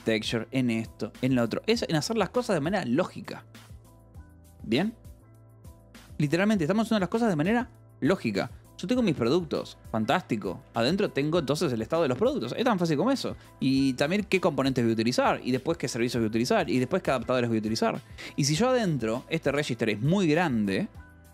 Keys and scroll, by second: 0.5 k, 1.9 Escape, 2.4 k, 9.7-11.8 typing, 10.0 Escape, 11.8 Escape, 13.1 j, 13.6 j, 14.4 Escape, 14.8-18.1 typing, 19.3 k, 20.0 shift+v, 20.8 Escape, 20.9 l.